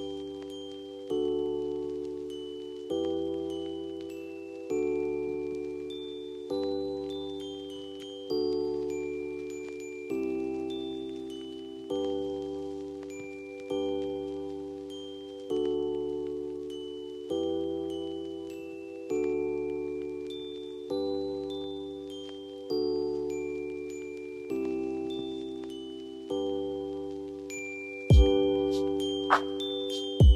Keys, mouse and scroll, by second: 1.4 scroll down 1, 1.9 F2, 3.7-23.9 drag, 24.5 click, 25.9 F2, 27.0 click, 27.0-28.7 drag.